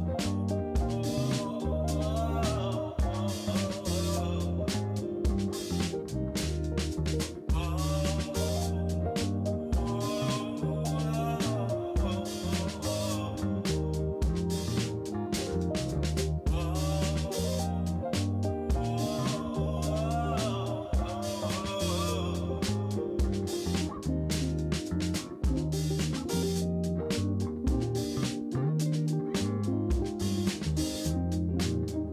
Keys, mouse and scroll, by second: 1.1 ctrl+b, 3.4 3, 4.0 click, 5.7 x, 7.1 2, 8.3 middle drag, 8.8-9.5 shift+middle drag, 9.9 KP_Decimal, 10.9 f, 11.2 shift+middle click, 11.5 shift+middle click, 12.3 i, 13.8 g, 15.6 e, 17.2-17.5 middle drag, 18.1 i, 19.7 e, 20.6 a, 21.0 shift+n, 21.6 Tab, 22.4 drag, 22.9 shift+drag, 23.2 middle click, 23.5 shift+middle click, 23.9 middle click, 25.6 click, 27.6 click, 28.2-31.7 shift+drag.